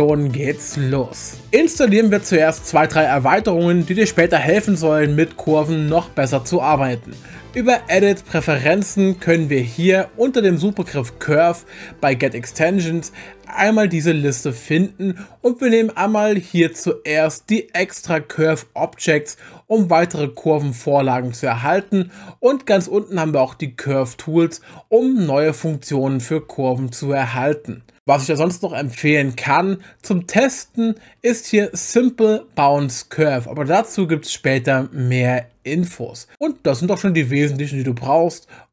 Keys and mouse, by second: 7.7-8.9 drag.